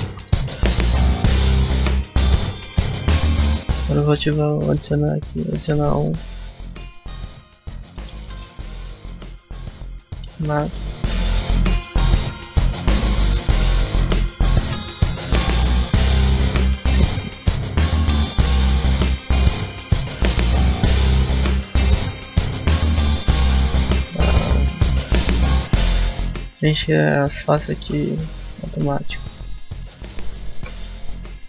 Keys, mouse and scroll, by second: 0.2 middle click, 1.5 middle click, 1.9 Tab, 2.0 middle click, 2.3 scroll up 1, 6.9 click, 23.0 scroll up 1, 23.6 middle click, 24.0 shift+middle click, 24.2 middle click, 24.6 scroll up 1, 24.9 shift+middle click, 25.2 scroll up 1, 25.3 middle click, 26.8 middle click, 27.6 Tab, 29.5 click, 29.5 middle click, 29.7 middle click, 30.6 alt+right click.